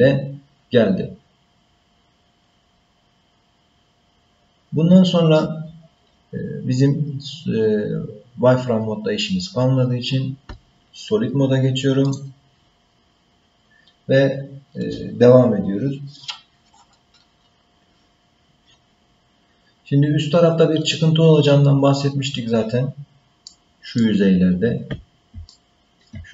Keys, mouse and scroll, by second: 12.0 click, 23.0-23.5 scroll down 3, 23.5 middle click, 24.3-25.3 scroll up 2, 25.5 shift+middle click.